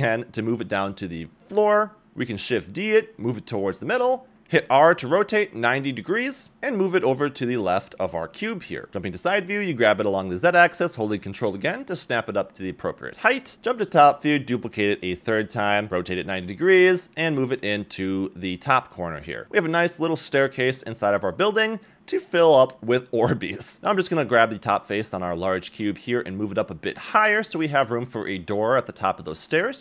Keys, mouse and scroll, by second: 0.5 g, 2.1 middle click, 2.1 scroll up 1, 2.1 shift+KP_7, 2.3 shift+d, 4.1 shift+middle click, 4.1 scroll down 2, 4.6 r, 6.3 g, 8.0-9.3 middle drag, 10.0 g, 12.4-13.6 middle drag, 13.7-14.1 scroll down 2, 14.0 scroll up 2, 14.0 shift+KP_7, 14.2 shift+d, 14.6 s, 15.6 r, 17.4 g, 18.7 scroll down 1, 18.9-19.6 middle drag, 19.9 g, 21.4-21.9 middle drag, 22.3 KP_4, 23.2 Tab, 23.2 click, 23.2 middle click, 23.8 click, 24.9 Tab, 25.4 click, 26.2 g, 28.5 Tab, 28.5 middle click, 28.5 scroll down 2, 28.5 a, 29.1 scroll up 2.